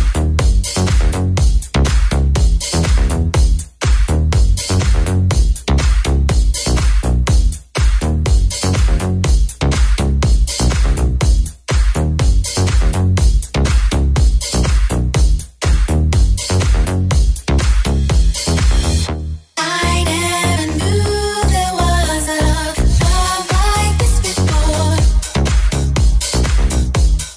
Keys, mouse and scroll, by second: 2.3 Tab, 6.6 Tab, 8.5-27.3 drag, 9.0 Tab, 13.8 ctrl+z, 16.7 Tab, 22.8 alt+middle click, 22.8 alt+right click, 25.5 alt+middle click, 25.5 alt+right click.